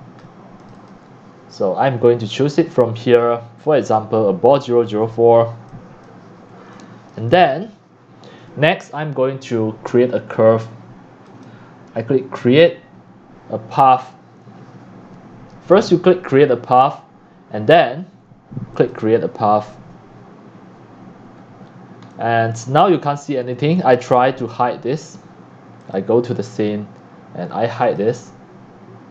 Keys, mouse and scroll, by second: 0.2-0.6 drag, 0.7 click, 2.2-3.2 drag, 3.9 click, 5.0 middle click, 5.0 scroll down 7, 5.6 x, 5.7 click, 6.2 click, 6.7 x, 7.1 drag, 7.2 c, 7.8-10.9 drag, 11.2 click, 12.6-15.9 drag, 16.1 click, 18.7 click, 21.2 click, 21.4 middle click, 21.4-21.9 scroll down 5, 21.6 middle click, 22.1 middle click, 22.4 scroll down 1, 22.8 x, 23.1-23.4 scroll, 23.9 click, 24.0 click, 24.6 q, 26.0 click, 27.8 click.